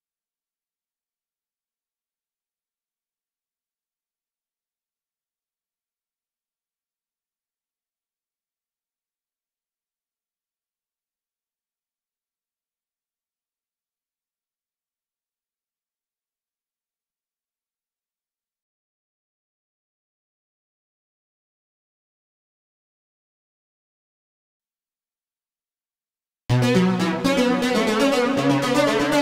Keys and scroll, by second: 0.0-2.7 typing, 26.4 space.